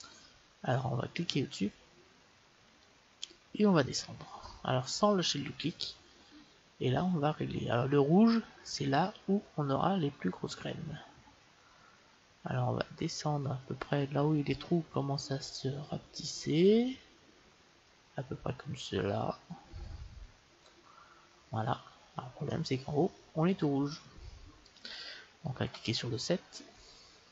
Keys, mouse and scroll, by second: 22.5-24.3 middle drag, 25.6 KP_7.